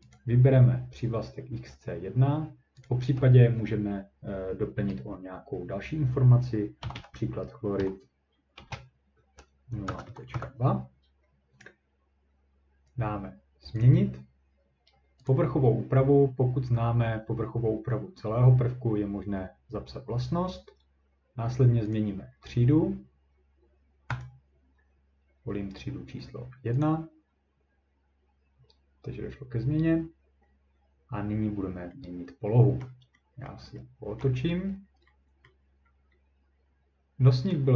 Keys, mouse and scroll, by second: 0.1 click, 2.9 click, 6.6-7.8 typing, 9.6-10.3 typing, 13.8 click, 15.3 click, 22.0 click, 24.2 click, 26.9 click, 32.8-33.2 scroll, 33.5 scroll, 34.2-34.5 ctrl+scroll, 34.5-35.1 scroll up 3, 35.5 middle click, 35.7-37.7 scroll up 3.